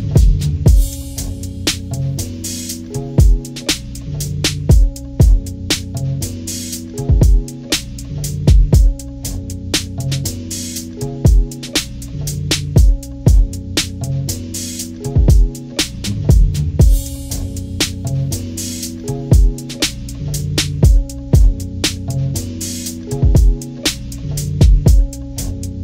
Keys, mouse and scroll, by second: 0.0 click, 1.5 click, 2.1 click, 3.9 click, 4.8 Delete, 6.6 ctrl+-, 7.3-7.8 scroll up 2, 8.0 ctrl+=, 8.4 ctrl+scroll down 2, 8.6 ctrl+=, 9.2 scroll down 1, 10.6 scroll up 1, 11.2 ctrl+-, 12.1 scroll up 2, 12.9 scroll up 2, 14.5-16.0 drag, 16.6 ctrl+scroll up 2, 18.0 click, 22.6 click, 24.0 click.